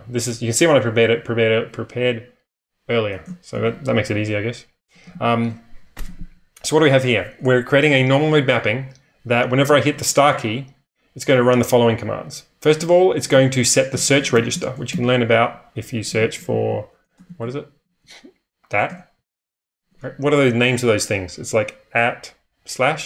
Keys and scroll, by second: 3.5 ctrl+[, 4.9 j, 5.1 j, 7.1 typing, 9.1-9.8 typing, 11.3 typing, 13.1-14.9 typing, 16.5-17.6 typing, 18.9 Return.